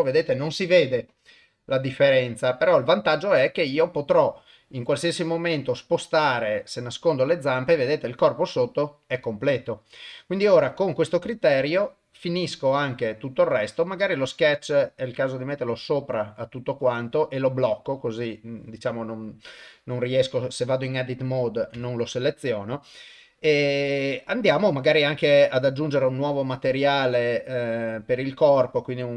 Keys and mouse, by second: 6.4 click, 8.1 click, 9.7 click, 11.3 shift+middle click, 13.5 click, 14.7 click, 14.9 click, 15.1 click, 15.2 click, 15.4 click, 15.6 click, 17.6 click, 25.7 click, 26.9 click, 28.0-29.1 drag.